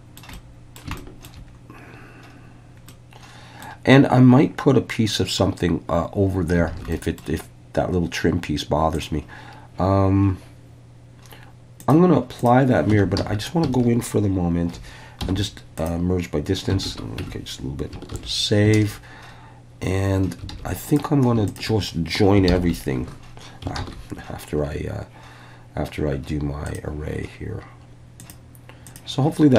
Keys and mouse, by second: 0.3 middle click, 1.0 shift+middle drag, 2.9 middle click, 6.7 alt+a, 6.9 middle click, 11.9-12.5 drag, 13.0 Tab, 13.2 a, 15.2 m, 16.9 alt+a, 17.3 Tab, 18.1 ctrl+s, 20.5 alt+a, 20.9 drag, 22.6 ctrl+j, 23.8 ctrl+z, 28.3-29.0 drag.